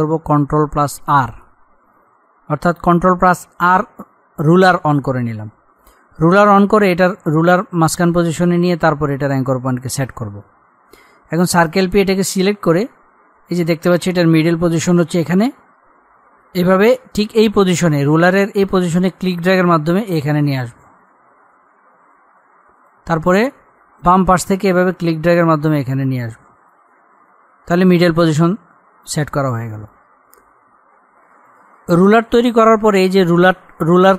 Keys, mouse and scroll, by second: 0.8 ctrl+r, 11.8 click, 12.6-13.3 scroll up 1, 19.1-27.4 drag, 27.4-28.2 scroll down 1.